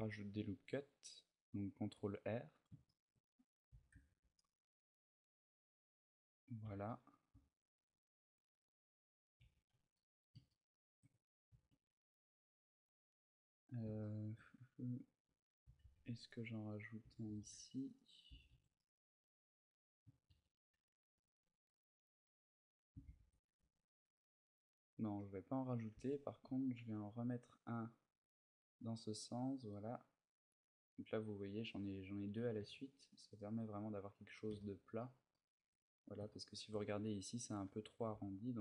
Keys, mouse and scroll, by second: 0.0 ctrl+r, 2.4 click, 2.6 shift+middle click, 3.2 scroll up 1, 3.4 a, 3.8 ctrl+r, 6.3 click, 6.3 a, 6.6 middle click, 7.5 ctrl+r, 9.1 click, 9.1 a, 9.5 Tab, 9.7 middle click, 10.2 shift+middle click, 10.9-11.6 scroll up 1, 11.6 scroll up 1, 13.8 shift+middle click, 14.3-15.0 scroll up 4, 14.6 Tab, 15.0 a, 15.6 ctrl+r, 15.6 a, 16.5 right click, 16.7 a, 17.1 ctrl+r, 17.7 right click, 18.0 a, 18.2 Tab, 18.5 middle click, 19.9 ctrl+z, 20.4 ctrl+z, 22.9 ctrl+shift+z, 23.8 Tab, 26.0 ctrl+r, 30.2 click, 30.5-31.1 scroll up 1, 32.2 scroll up 4, 32.3 Tab, 32.6-33.7 scroll down 4, 33.1 middle click, 33.8-34.7 scroll down 2, 34.3 shift+middle click, 34.7 shift+middle click, 35.0 shift+middle click, 35.5-36.0 scroll up 4, 36.6 shift+middle click, 36.6-37.2 scroll up 2, 37.4 Tab, 37.9 a, 38.5 ctrl+r.